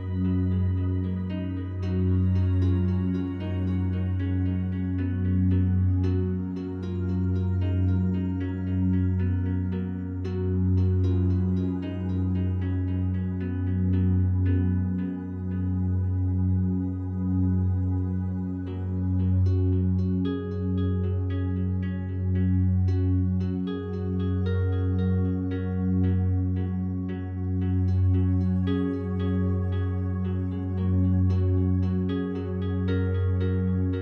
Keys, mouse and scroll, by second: 10.6 scroll down 1, 11.1-20.9 alt+drag, 20.9 Tab, 23.1 click, 24.0 shift+a, 26.9 click, 28.6-31.2 alt+drag, 31.2 s.